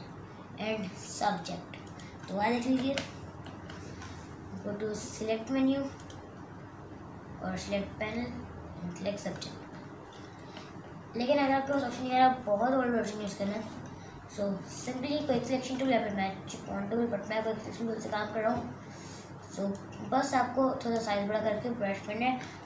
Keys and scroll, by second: 3.0 super+KP_Add, 11.1 super+KP_Subtract.